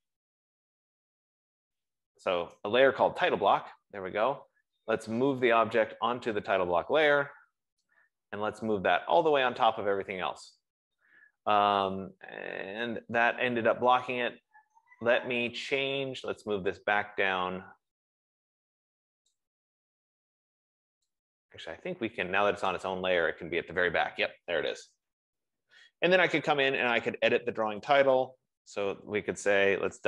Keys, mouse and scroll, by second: 0.0-2.5 typing, 2.7 Return, 4.9-5.6 typing, 7.0 click, 9.8 click, 19.5 click, 20.8 F15, 22.9 click, 27.3 click, 28.5 click, 28.5 click.